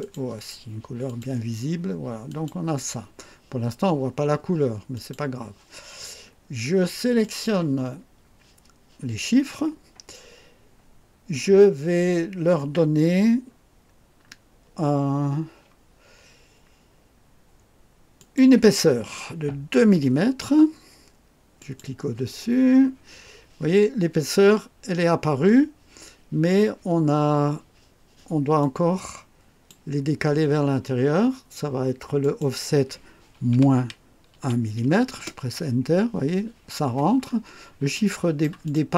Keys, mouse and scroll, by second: 0.0 click, 1.0 click, 2.3 click, 4.9 click, 7.2 click, 13.8-14.4 scroll up 3, 18.2 click, 19.8 2, 21.6 click, 28.6-29.8 drag, 32.2 click, 33.5 KP_Subtract, 34.3 KP_1, 35.1 KP_Enter, 37.2 scroll up 2, 37.9 right click, 38.6 click.